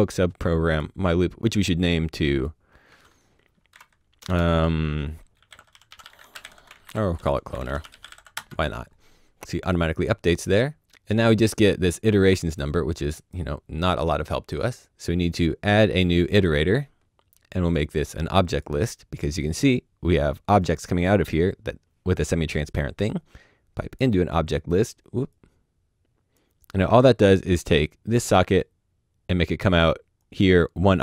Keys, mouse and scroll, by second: 0.6 a, 0.6 click, 2.3 click, 3.7-4.2 typing, 5.3-8.1 typing, 8.3 Return, 12.6 Return, 14.6 click, 16.3 click, 18.4 click, 19.6-20.6 scroll up 1, 20.6 click, 25.3 click, 27.7 click, 29.9 click.